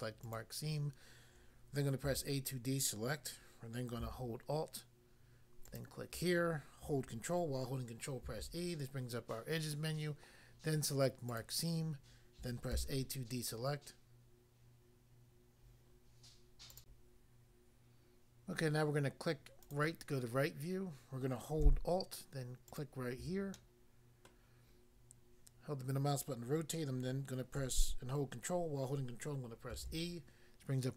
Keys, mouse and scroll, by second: 0.2 click, 0.3 click, 2.1 a, 5.7 alt+click, 8.2 ctrl+e, 11.3 click, 11.4 click, 12.8 a, 16.8 click, 16.9 click, 19.7 click, 19.8 click, 22.7 alt+click, 22.8 alt+click, 23.6 middle click, 24.3 middle click, 29.8 ctrl+e.